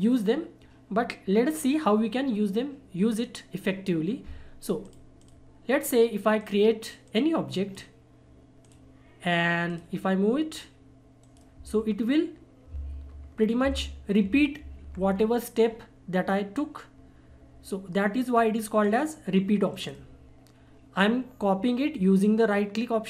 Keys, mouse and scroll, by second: 4.8-11.2 drag, 11.2 right click, 14.3 ctrl+r, 15.1-16.9 scroll down 1, 18.3-18.8 scroll up 1, 18.8 click, 19.7 right click.